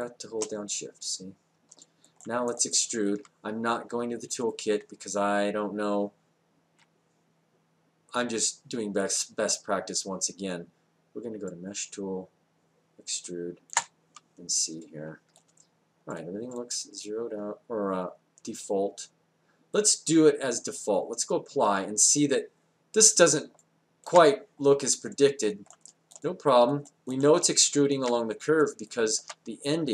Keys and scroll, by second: 6.8 space, 13.7 space.